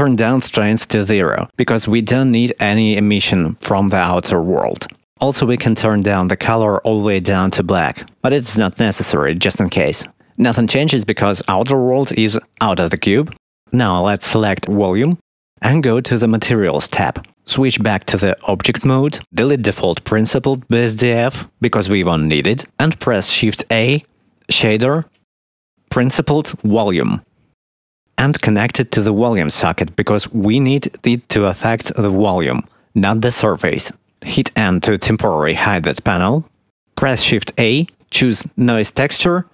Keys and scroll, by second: 1.3 0, 1.4 Return, 22.3 x, 23.5 shift+a, 35.0 n, 37.0 shift+a.